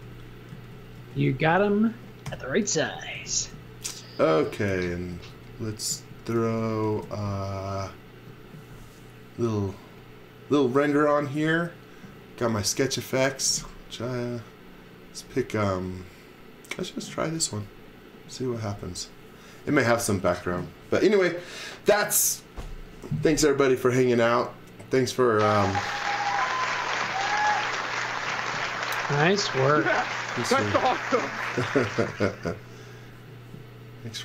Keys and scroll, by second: 0.0-7.9 typing.